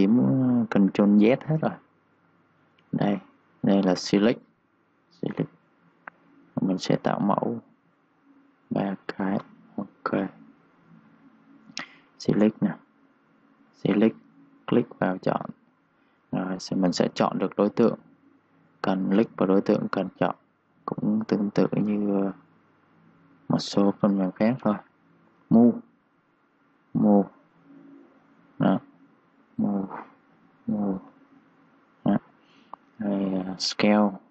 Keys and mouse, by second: 0.9 click, 8.3 ctrl+click, 9.6-11.8 typing, 10.5 click, 11.0 click, 11.3 click, 12.4 click, 28.8 z, 29.4 click, 30.2 z, 30.4 click, 31.1 z, 31.5 click, 32.3 ctrl+z, 33.1 click.